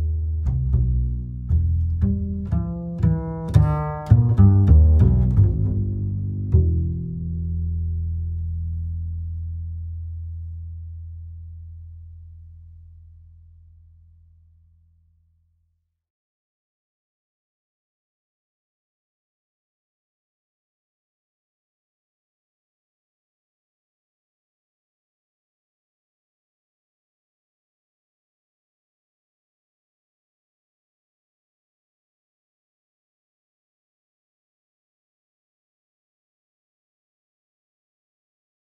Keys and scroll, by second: 1.0 ctrl+e, 2.3 ctrl+e, 3.4 ctrl+v, 8.9 Return, 20.2 Home, 24.0 Return, 35.2 Home.